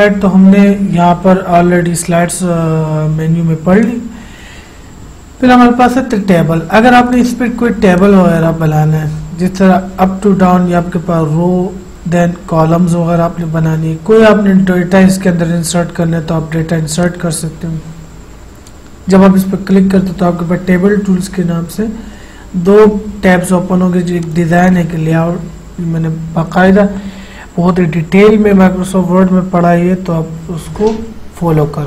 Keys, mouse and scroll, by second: 3.9 click, 7.2 click, 7.3 click, 17.1 click, 24.3 click.